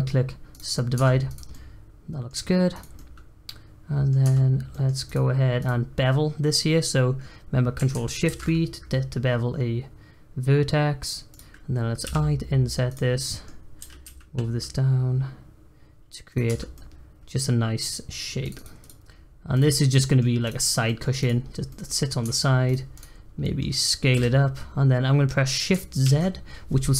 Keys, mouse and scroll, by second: 0.9 Tab, 1.2 click, 1.5-2.5 middle drag, 2.5 scroll up 1, 2.7 click, 2.9-4.2 middle drag, 4.2 Tab, 4.5 scroll up 1, 4.7 middle click, 5.0 click, 5.6 click, 8.2 ctrl+shift+b, 13.2 middle click, 13.7 g, 16.4 Tab, 16.7-18.4 middle drag, 18.4 click, 19.1-19.5 scroll down 3, 19.5 click, 19.7 middle click, 20.4 click, 20.8 middle click, 21.2 click, 21.7 middle click, 21.9-22.6 scroll up 2, 22.6 click, 22.9 click, 23.2 scroll down 1, 23.4 middle click, 24.1 s.